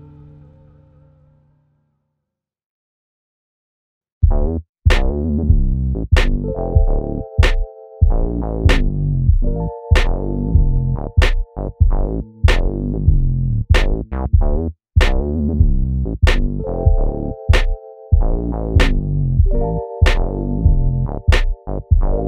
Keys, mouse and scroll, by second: 0.2-0.5 scroll down 1, 1.2 s, 2.9 scroll up 1, 3.4-4.3 scroll down 1, 4.3 g, 5.0 alt+a, 5.4 c, 6.5 alt+a, 9.1-9.5 scroll up 1, 9.5 Tab, 9.9-10.4 scroll down 1, 11.0 `, 11.6-12.5 scroll up 2, 11.8 `, 15.0 `, 17.2 `, 20.0-20.5 scroll down 2, 20.5 KP_1, 20.8-21.5 scroll up 1.